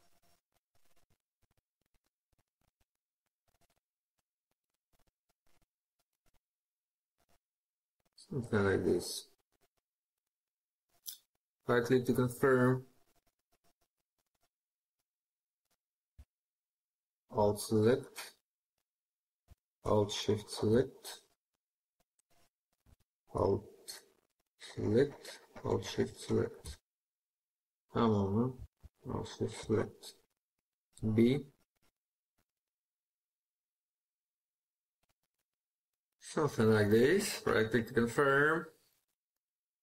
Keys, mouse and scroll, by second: 1.0 middle click, 10.0 right click, 11.8 scroll up 1, 11.9 scroll down 1, 12.0 scroll up 1, 16.3 alt+click, 19.9 alt+shift+click, 23.8 alt+shift+click, 25.4 alt+shift+click, 28.8 alt+shift+click, 30.8 b, 36.7 right click, 37.6 scroll up 1, 37.9 scroll down 1, 37.9 scroll up 1, 38.0 scroll down 1, 38.3 scroll up 1, 38.6 scroll down 1, 39.1 scroll up 1, 39.1 scroll down 1, 39.6 scroll up 1, 39.7 scroll down 1.